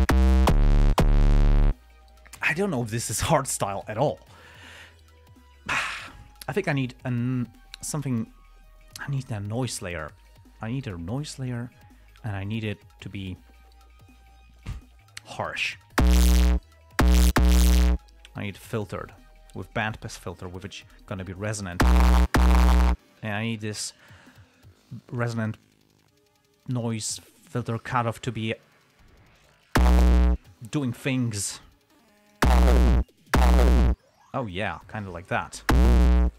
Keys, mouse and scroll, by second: 10.5 click, 11.8 click, 13.0 click, 14.9 click, 18.8 click, 19.4 click, 20.2 click, 20.8-22.0 drag, 27.0 click, 27.9 click, 29.2 click, 32.1 click, 34.8 click, 36.1 click.